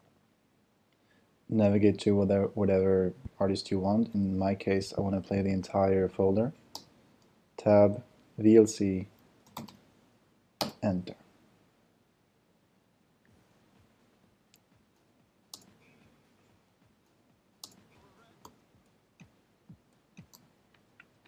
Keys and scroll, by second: 0.0 Right, 1.8 Down, 4.1 Left, 6.7 Tab, 9.2-10.2 typing, 10.6 Return, 15.5 Return.